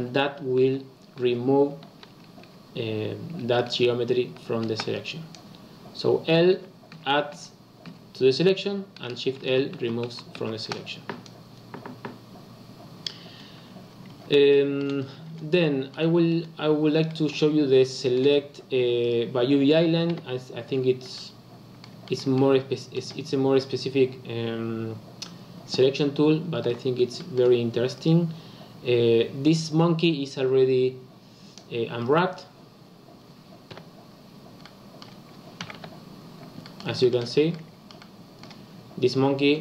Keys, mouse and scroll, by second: 0.6 shift+l, 1.2 shift+l, 4.6 shift+l, 6.5 l, 6.9 l, 7.3 l, 7.8 l, 9.4 shift+l, 9.7 shift+l, 10.0 shift+l, 10.3 shift+l, 13.2-14.4 scroll down 11, 14.4 shift+middle click, 15.0-15.6 scroll up 4, 15.6 shift+middle click, 16.2-17.0 scroll up 2, 17.0 shift+middle click, 17.4-18.0 scroll up 5, 18.0 shift+middle click, 18.3-18.7 scroll up 2, 18.7 Tab, 19.0 click, 20.0 KP_Decimal, 20.6-21.1 scroll up 1, 21.1-25.3 middle drag, 26.6 Tab, 27.1 middle click, 27.9 click, 32.1 click, 34.6 middle click, 35.5 a, 35.7 KP_Decimal, 36.6-39.6 middle drag.